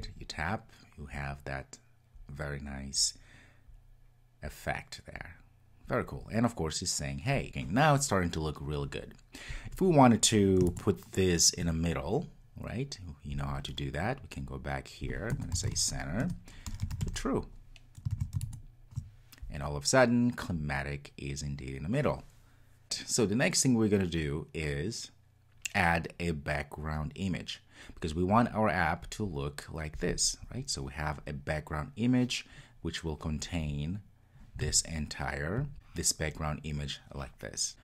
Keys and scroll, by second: 16.3 Return, 18.2 super+s.